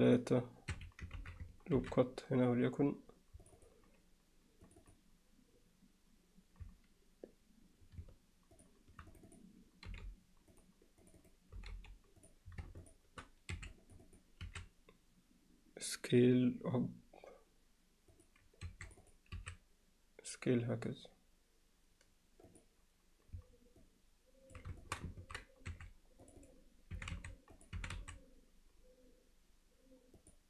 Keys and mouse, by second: 1.2 ctrl+z, 1.8 ctrl+r, 4.7 click, 4.9 click, 9.3 click, 9.9 g, 11.0 click, 11.2 click, 11.6 g, 12.9 shift+click, 13.6 3, 13.8 click, 14.1 click, 14.5 s, 18.7 2, 19.0 click, 19.4 s, 23.8 alt+middle click, 24.8 alt+shift+middle click, 26.3 click, 27.0 e, 27.8 e.